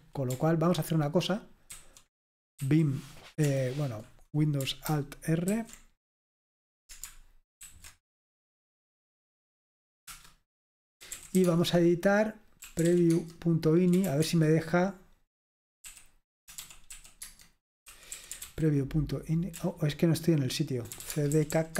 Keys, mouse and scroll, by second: 1.8 ctrl+c, 2.6 v, 5.6 ctrl+super+r, 7.6 alt+super+r, 10.4 Return, 10.8-14.6 typing, 15.9-21.7 typing.